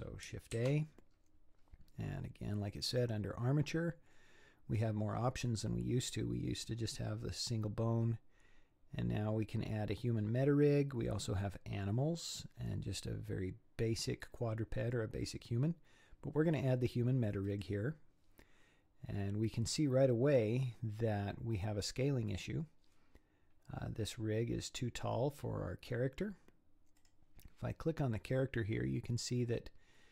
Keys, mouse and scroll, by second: 0.5 shift+a, 19.3-20.4 scroll down 3, 20.4-22.7 scroll up 1, 27.0 click, 29.7-30.1 scroll up 1.